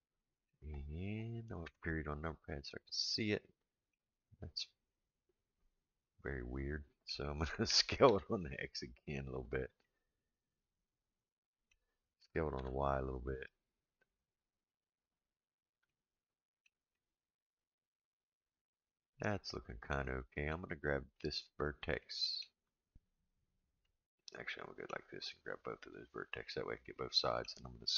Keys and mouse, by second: 1.6 KP_Decimal, 2.6-3.9 middle drag, 4.9-7.1 middle drag, 7.7 s, 9.8-11.7 middle drag, 12.2 s, 15.9 shift+middle click, 16.9-20.5 middle drag, 21.1 click, 22.0 middle click, 23.8-24.9 middle drag, 25.6 click, 26.5 middle click.